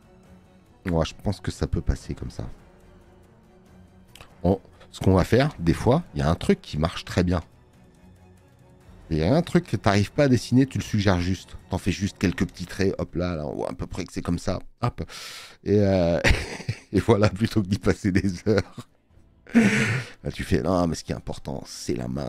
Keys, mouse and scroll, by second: 17.7 space, 18.0 click, 19.3 scroll, 20.8 click.